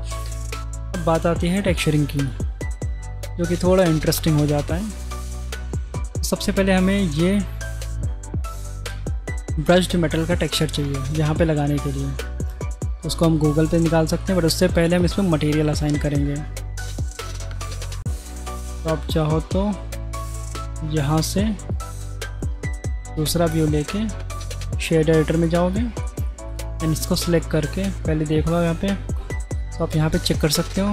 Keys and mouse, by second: 0.3 middle drag, 1.5 click, 5.6 click, 10.9-11.3 middle drag, 13.9-14.2 middle drag, 18.8 click, 21.7 click, 22.0-23.2 drag, 23.7-24.6 drag, 25.4 click, 26.1 click, 27.8-30.9 drag.